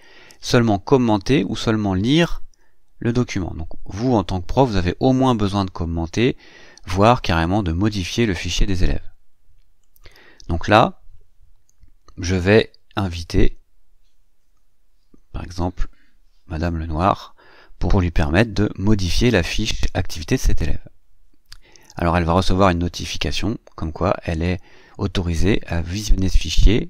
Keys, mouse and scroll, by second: 9.6 click, 12.1-13.8 typing, 15.3 click.